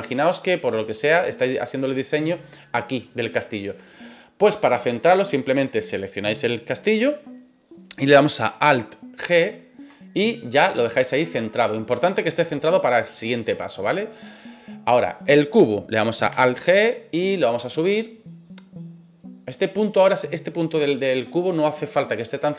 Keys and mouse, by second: 0.6 middle drag, 1.0-2.1 right drag, 2.3-3.0 middle drag, 3.2-3.7 middle drag, 9.4 alt+g, 11.7-13.0 middle drag, 14.0 right click, 16.5 alt+g, 17.9 click, 19.2 click.